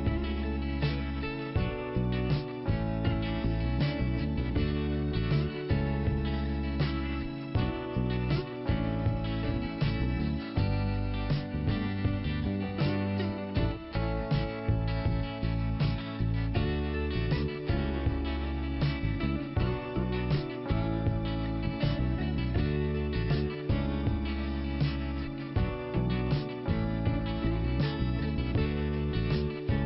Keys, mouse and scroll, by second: 6.8 middle click, 7.5 Delete, 8.9 click, 9.1 click, 10.8 middle click, 16.7 middle click, 22.0 scroll down 1, 23.5 click, 25.3 click, 26.9 click, 28.5 click, 28.6 click.